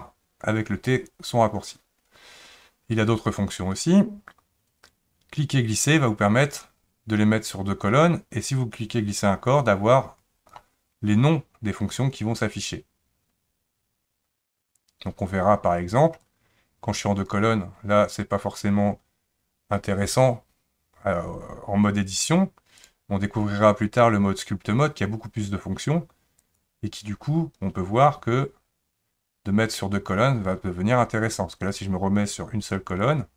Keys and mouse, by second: 5.8 click, 16.2-17.3 drag, 22.8-26.6 drag, 33.0 click.